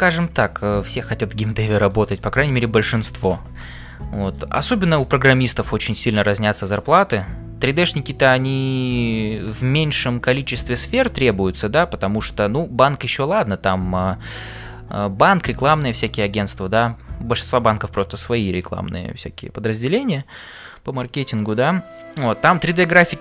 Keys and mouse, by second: 0.1 shift+middle click, 0.5 middle click, 2.4 middle click, 4.9 click, 5.5 middle click, 6.2 f, 6.5-10.2 middle drag, 10.7 click, 11.2 middle click, 14.0 click, 16.3-17.5 middle drag.